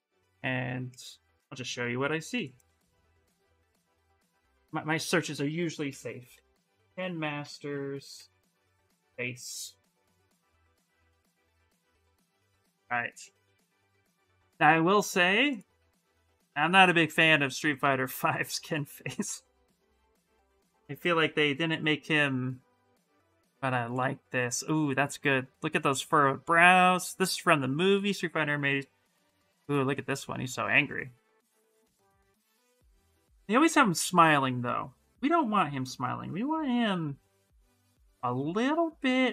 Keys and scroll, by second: 3.2 g, 3.5 o, 3.9 shift+Return, 5.7-9.4 typing, 10.6 Return.